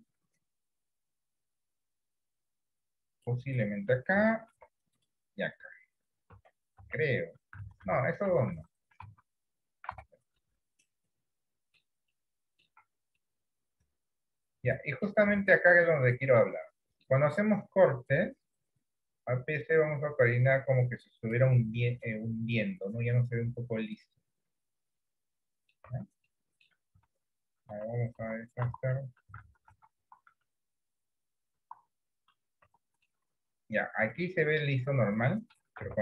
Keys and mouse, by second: 4.6 ctrl+r, 6.5 Tab, 6.9 Tab, 7.8 ctrl+z, 8.1 ctrl+z, 8.5 ctrl+z, 8.6 ctrl+z, 9.3 Tab, 10.1 Tab, 10.5-11.8 middle drag, 12.2 middle click, 12.9 Tab, 13.3-15.1 middle drag, 15.5 shift+middle click, 16.0-17.2 middle drag, 18.2 click, 19.1-21.4 drag, 22.2 click, 23.4 click, 25.5 middle click, 26.0 Tab, 26.4 middle click, 27.2 ctrl+z, 27.5 ctrl+z, 27.7 ctrl+z, 28.3 ctrl+z, 28.7 ctrl+z, 29.5 ctrl+z, 29.8 ctrl+z, 30.0 ctrl+z, 30.3 ctrl+z, 31.7 ctrl+z, 32.8 Tab, 33.2-35.6 middle drag, 35.9 Tab.